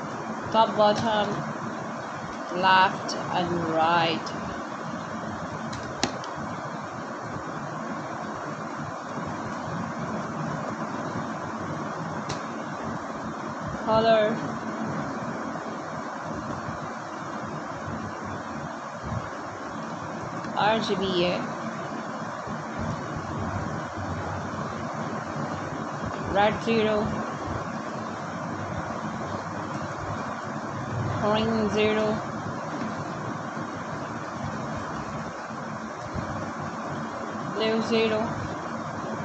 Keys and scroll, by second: 0.9 r, 4.8 b, 6.7 Down, 7.6 Return, 10.4 0, 11.5 Down, 14.2 BackSpace, 15.4 0, 16.3 BackSpace, 17.0 0, 19.0 BackSpace, 20.4 Home, 21.1 0, 22.5 ctrl+z, 25.8 0, 28.5 Down, 28.7 Up, 28.9 Right, 31.8 BackSpace, 33.3 0, 33.7 ., 38.1 0, 38.4 7.